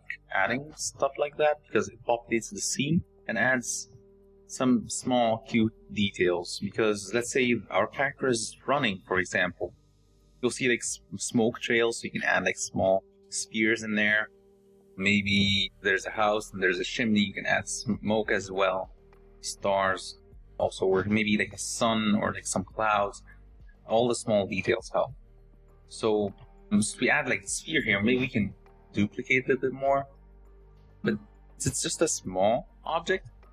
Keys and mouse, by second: 0.0-1.8 typing, 19.8 s, 26.3 g, 30.3-30.8 shift+drag.